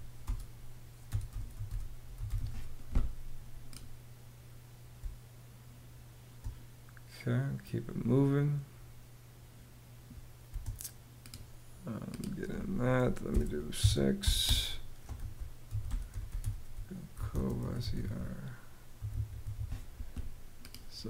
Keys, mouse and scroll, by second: 0.0-2.4 typing, 4.5 space, 10.0 space, 12.6-19.6 typing.